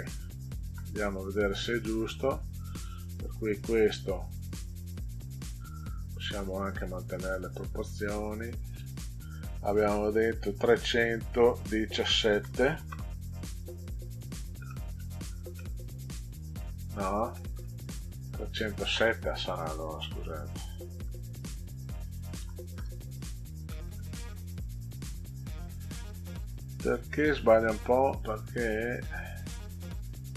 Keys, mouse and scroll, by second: 0.1 click, 1.4 click, 2.3 click, 6.7 click, 7.9 click, 11.3 3, 11.9 1, 12.3 7, 14.7 middle click, 15.0 scroll up 2, 15.5 middle click, 17.3 middle click, 18.7 click, 21.0 BackSpace, 22.3 0, 22.7 Return, 23.7 middle click.